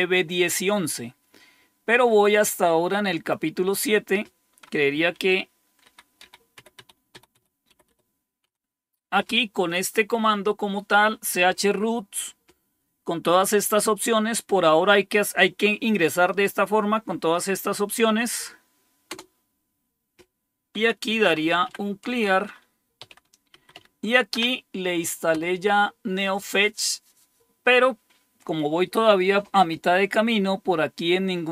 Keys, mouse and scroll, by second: 3.1 click, 5.1 Up, 5.9 Up, 6.2 Up, 6.5 Up, 6.7 Up, 7.1 Up, 7.5 Up, 7.7 Up, 7.8 Up, 8.4 Down, 19.1 Return, 20.8-24.4 typing, 25.3 Return.